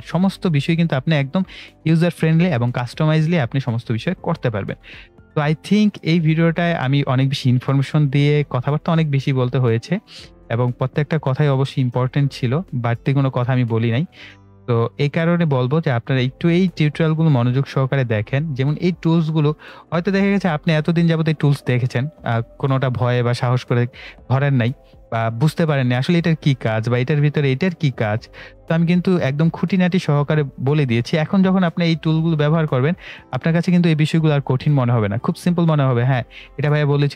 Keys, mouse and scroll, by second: 26.5-29.5 drag, 32.1 click.